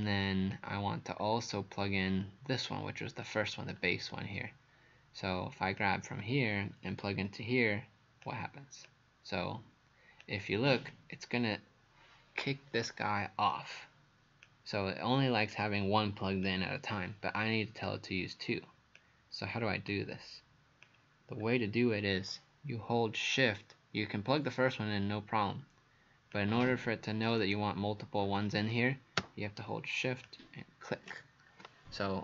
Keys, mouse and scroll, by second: 1.2-2.6 scroll down 2, 2.6-3.2 scroll up 1, 3.2 click, 5.8 click, 21.4 scroll up 1, 26.4 click.